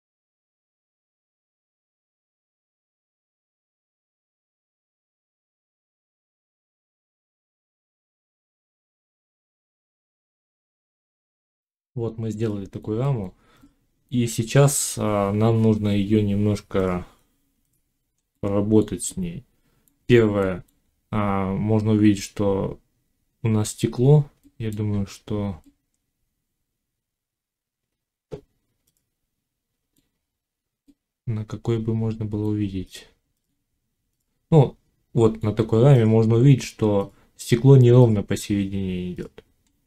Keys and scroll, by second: 0.5 j, 1.2 z, 1.3 Tab, 2.1 ctrl+e, 3.1 1, 6.2 x, 8.5 Tab.